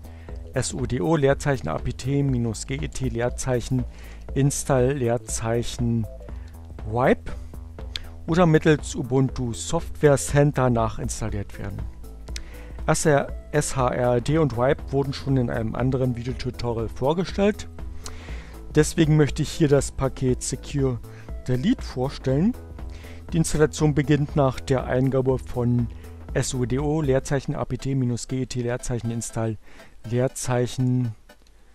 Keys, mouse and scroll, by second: 1.2-6.6 typing, 29.8 BackSpace, 30.2 s, 31.5-31.7 typing.